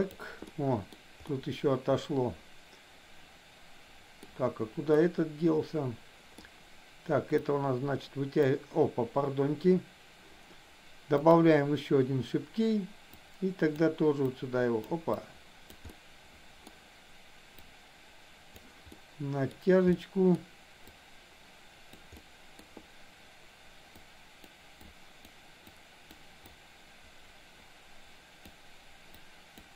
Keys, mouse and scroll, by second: 0.5 middle click, 1.3-4.1 middle drag, 5.0-6.3 middle drag, 7.4-8.4 drag, 11.3 click, 13.1 click, 14.3 click, 15.1 click, 15.9 middle click, 17.5-18.5 drag, 19.0 middle click, 20.0 middle click, 20.9-22.0 drag, 22.1 middle click, 24.0 click, 24.8 click, 25.6 click, 26.5-28.5 drag, 29.4 click.